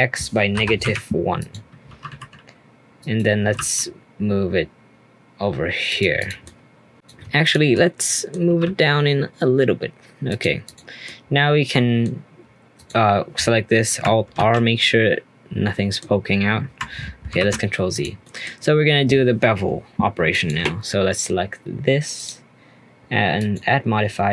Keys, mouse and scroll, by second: 1.8 g, 3.4 g, 6.2 click, 6.4-6.9 middle drag, 6.9 click, 7.4 shift+click, 7.7-8.4 middle drag, 8.4 g, 10.6 click, 11.0-12.7 middle drag, 12.7 click, 14.3 alt+r, 14.8-17.4 middle drag, 17.4 ctrl+z, 17.9 click, 18.2-20.3 middle drag, 20.3 click, 22.1 click.